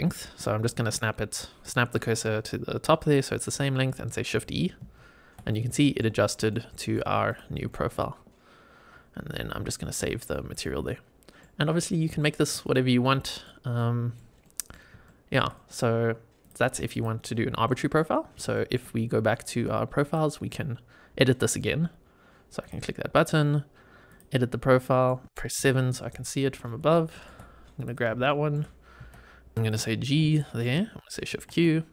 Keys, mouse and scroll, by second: 0.6 shift+right click, 4.8 shift+e, 5.4-5.9 middle drag, 6.1 shift+middle drag, 6.6 middle drag, 7.2 click, 7.6 middle click, 8.1-9.1 scroll up 1, 9.9 click, 10.5-11.3 middle drag, 11.8 scroll down 1, 12.1 shift+middle drag, 12.6 click, 12.9-13.4 middle drag, 13.7-14.1 middle drag, 14.4 middle click, 14.9-15.3 shift+middle drag, 15.4 middle click, 16.4 click, 16.9 click, 17.6 middle drag, 18.1 scroll down 2, 18.4 shift+middle click, 19.9 click, 21.3-22.5 scroll down 3, 22.5 click, 24.0 click, 24.7 scroll down 1, 24.7 middle click, 25.5 KP_7, 26.1-26.7 scroll up 5, 26.8 shift+middle click, 27.7 click, 28.2 shift+middle click, 28.9 g, 29.5 click, 29.9 scroll down 2, 30.3 shift+middle click, 31.2 shift+q, 31.7 scroll down 2.